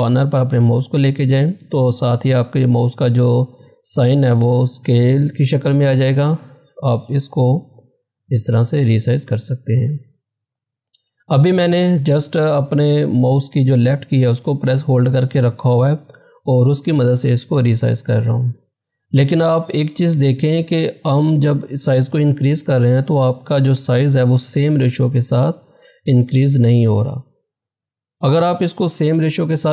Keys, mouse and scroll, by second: 7.0-17.0 drag, 28.6 ctrl+Num_Lock, 29.1 ctrl+z.